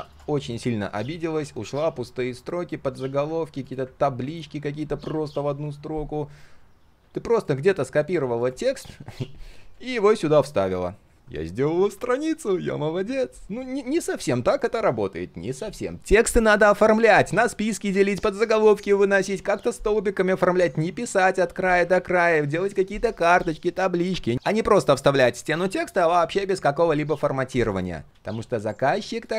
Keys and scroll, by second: 8.1 ctrl+c, 10.3 ctrl+v, 11.1 ctrl+z, 21.9 ctrl+z, 28.1 ctrl+z, 28.9 ctrl+z.